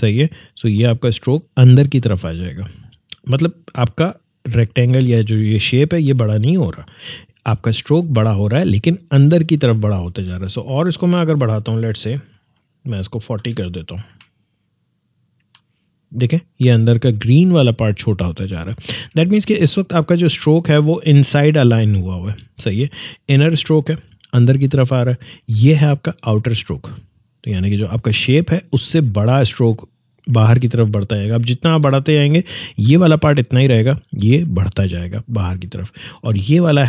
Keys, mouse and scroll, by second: 0.6 click, 10.9-13.3 drag, 13.3-14.0 typing, 15.3 Tab, 18.6 ctrl+Tab, 18.9 ctrl+z, 26.6 click.